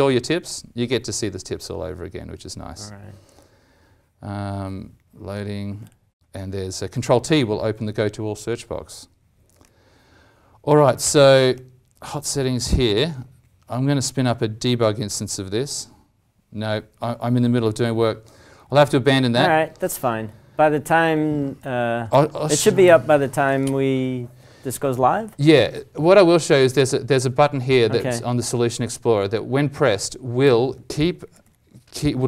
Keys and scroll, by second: 22.0 alt+Tab, 22.8 alt+Tab, 31.4 alt+Tab.